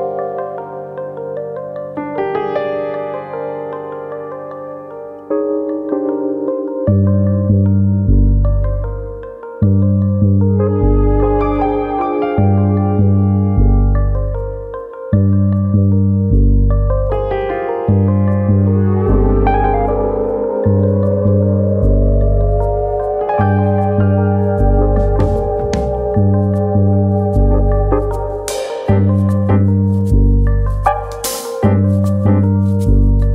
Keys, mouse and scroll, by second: 0.4 scroll up 2, 0.7 middle click, 2.3-2.8 scroll down 5, 2.8 middle click, 4.3-4.7 scroll down 2, 4.5 middle click, 4.7 middle click, 5.1 Tab, 5.1 scroll down 2, 5.4 middle click, 6.4-7.1 scroll up 4, 6.6 middle click, 7.1 Tab, 7.3 shift+middle click, 7.6 middle click, 8.2 click, 8.6 shift+middle click, 8.9 middle click, 9.5 click, 10.8 ctrl+z, 11.1 shift+middle click, 13.4 click, 14.5 click, 15.3 middle click, 15.6 ctrl+z, 15.8 middle click, 16.3 click, 16.5 middle click, 17.0 click, 18.1 click, 18.3 middle click, 18.9 click, 19.7 middle click, 20.1 middle click, 20.8 Tab, 21.0 scroll down 1, 21.3 middle click, 21.9 Tab, 22.2 middle click, 22.6 click, 22.8 middle click, 23.3 click, 24.2 middle click, 24.7 Tab, 24.9 middle click, 25.6 shift+middle click, 25.8 middle click, 26.1 Tab, 26.7 click, 27.0 shift+click, 27.2 middle click, 27.7 click, 28.8 ctrl+z, 29.5 3, 29.6 click, 29.9 middle click, 30.3 click.